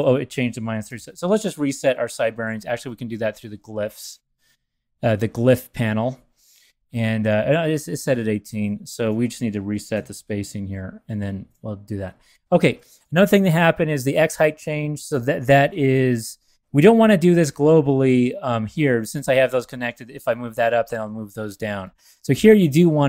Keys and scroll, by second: 0.9 alt+shift+super+n, 2.4 super+w, 7.8 Return, 9.9 alt+super+n, 13.0 v, 17.2 super+a, 22.3 v.